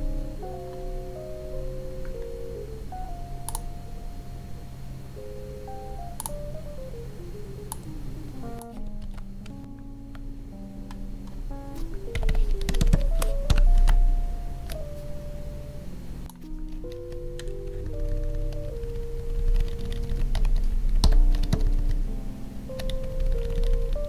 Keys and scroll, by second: 9.0 ctrl+c, 9.7 alt+Tab, 12.7 Up, 13.4 ctrl+v, 17.1 Down, 21.4 Up.